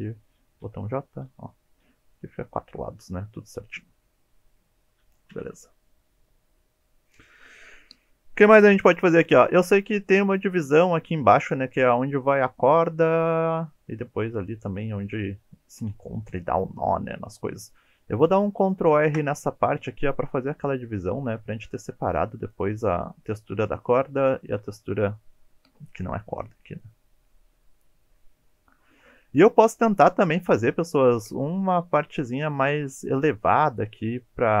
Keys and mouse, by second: 0.6 j, 3.7 middle click, 5.3 KP_1, 18.9 ctrl+r, 22.4 click, 29.9-30.5 middle drag.